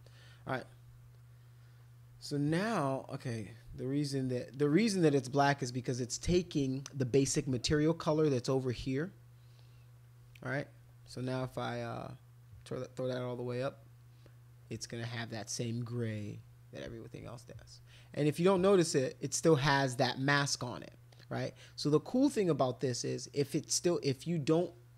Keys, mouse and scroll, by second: 3.0 click, 3.5 click, 4.3 click, 7.5-9.6 drag, 15.6-16.8 drag, 18.7 ctrl+click, 19.3 ctrl+click, 19.6 ctrl+click, 19.8 ctrl+click, 20.2 ctrl+click, 21.1 ctrl+click.